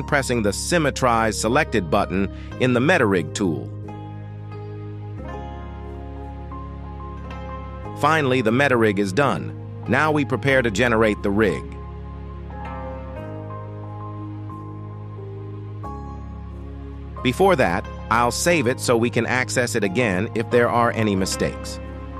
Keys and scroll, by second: 16.5 ctrl+s.